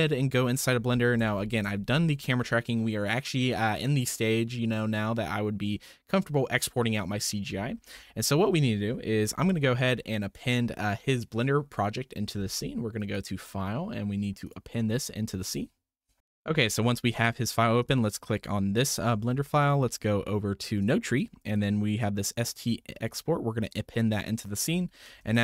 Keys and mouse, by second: 1.5 shift+middle click, 8.0-8.4 shift+middle drag, 13.1-14.5 drag, 24.7 middle click, 25.2 shift+a.